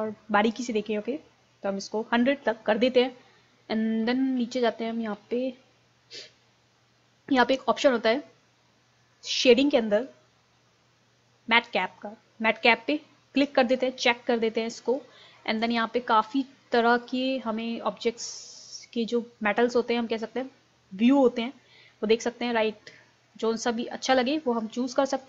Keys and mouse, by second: 4.2-9.3 middle drag, 9.3-11.8 drag, 13.8-19.3 drag, 23.4-25.2 drag.